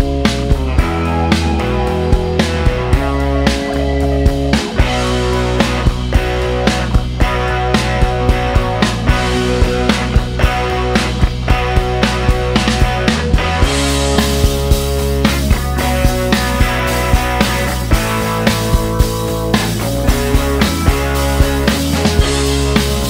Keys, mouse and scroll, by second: 0.3 middle click, 2.1 click, 3.6 click, 4.7 a, 5.7-6.6 typing, 11.7-14.2 drag, 15.1 middle click, 19.8-22.7 drag, 22.7 middle click.